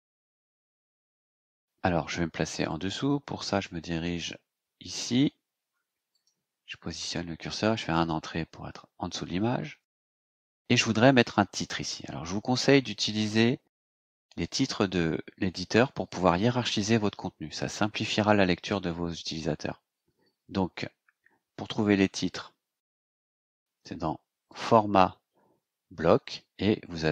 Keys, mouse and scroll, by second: 2.6 click, 4.0 click, 6.0 click, 7.9 Return, 10.2 scroll down 2, 20.8-21.1 scroll up 2, 22.4-22.7 scroll up 2, 24.5 click.